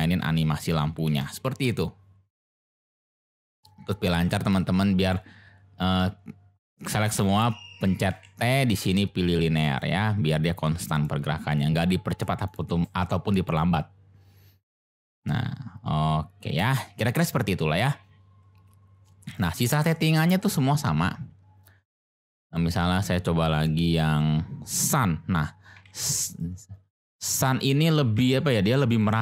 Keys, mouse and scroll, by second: 1.0 space, 4.1 click, 4.5 click, 7.1 t, 8.1 t, 10.7 click, 11.5 click, 12.4 click, 12.8 space, 16.6 space, 19.0-19.3 drag, 20.1 shift+a, 25.7 g, 25.8 z, 26.3 click, 27.6 click, 28.0 g, 28.1 z, 29.0 click.